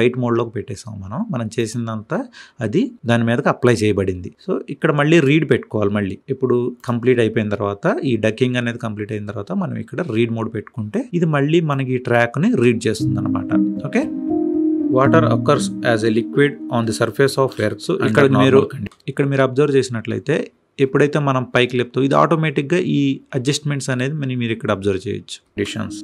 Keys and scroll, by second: 12.4 space, 18.6 space, 25.4 space.